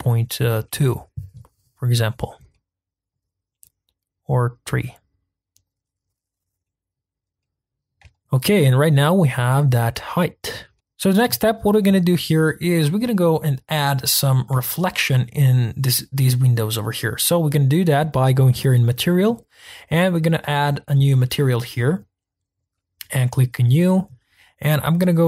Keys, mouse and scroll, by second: 2.2 scroll down 1, 2.5 middle click, 3.2-4.7 scroll up 1, 4.7-6.6 drag, 6.6 middle click, 7.0-7.4 scroll down 2, 7.4-9.6 middle drag, 9.6-10.3 scroll up 2, 10.3-10.7 scroll down 3, 10.7 shift+middle click, 11.4-12.1 scroll down 2, 12.1-12.9 shift+middle drag, 12.9-13.3 scroll down 5, 13.3-14.0 scroll up 8, 14.0 middle click, 14.4-16.3 scroll down 1, 19.4 click, 21.5-23.9 drag.